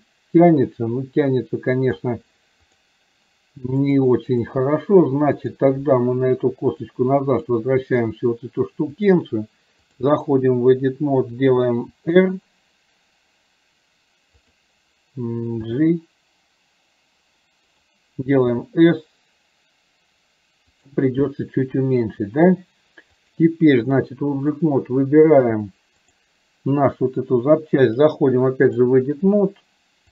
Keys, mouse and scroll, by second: 2.7 click, 4.0-4.6 drag, 5.5 drag, 7.0 click, 9.1-10.2 drag, 23.3 click, 26.1 click, 28.1 click.